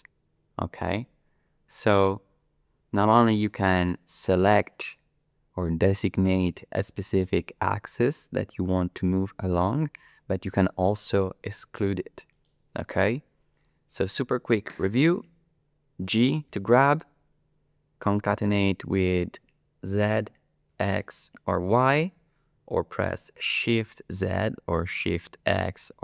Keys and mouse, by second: 13.6-14.8 middle drag, 16.5 g, 20.0 z, 20.7 x, 21.6 y, 23.7 shift+z, 25.2 shift+x.